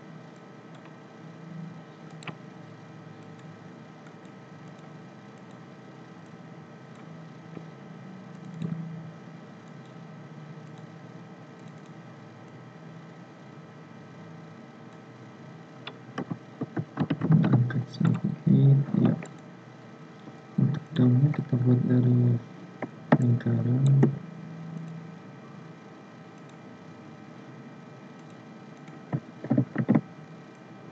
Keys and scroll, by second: 29.5 ctrl+c, 29.8 ctrl+f.